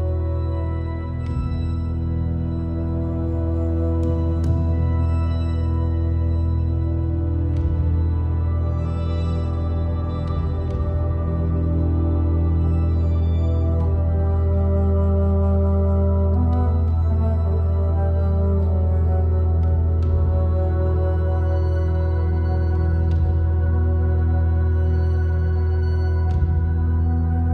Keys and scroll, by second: 19.2-20.5 typing.